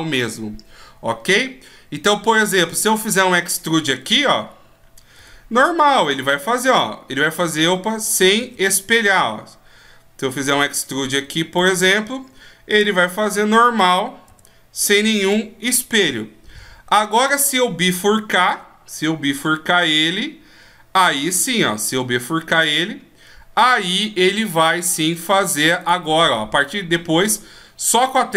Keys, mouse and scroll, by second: 2.4 right click, 3.6 e, 8.0 ctrl+z, 8.7 e, 12.7 e, 16.8 right click, 18.1 shift+e, 25.4 right click, 25.8 e.